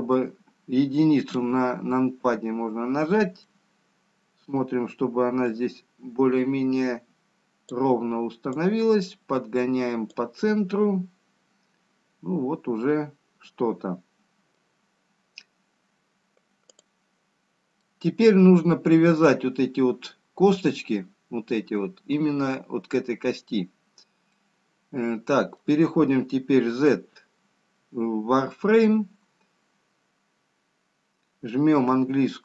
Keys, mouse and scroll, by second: 0.2 middle click, 2.5 KP_1, 3.8 middle click, 7.0 click, 11.2 middle click, 16.6 scroll down 1, 18.0 click, 18.0-18.6 scroll up 3, 19.4 middle click, 20.6-21.6 scroll down 1, 21.8 scroll down 1, 24.4-25.6 scroll down 2, 25.6 middle click, 26.9 z, 30.8-32.4 scroll up 2.